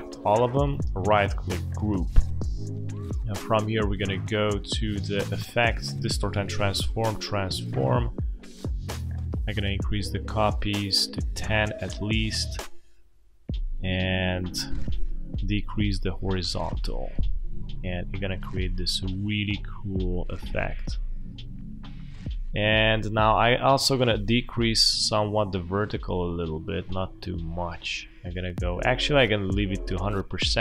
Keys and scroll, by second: 2.0 space.